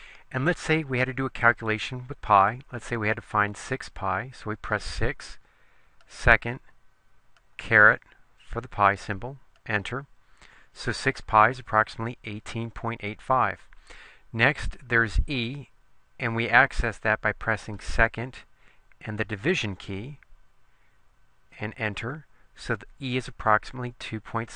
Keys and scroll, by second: 4.9 6, 7.5 ^, 9.7 Return, 19.6 /, 21.7 Return.